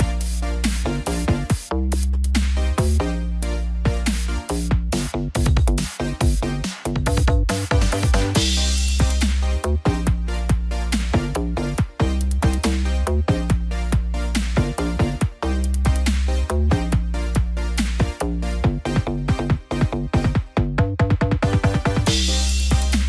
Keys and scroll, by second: 8.7 ctrl+g.